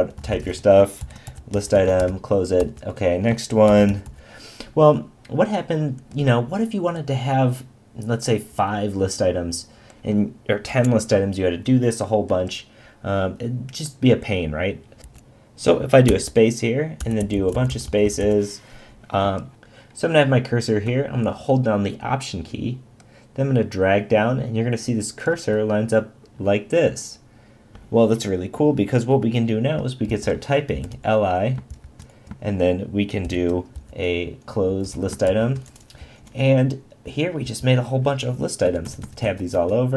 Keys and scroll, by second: 1.0 shift+<, 2.0 shift+>, 2.6 Return, 16.1 Return, 17.2 Return, 17.7 Return, 18.2 Return, 30.1 shift+<, 31.7 shift+>, 33.2 shift+<, 35.3 shift+>, 36.0 Left, 38.6 Tab.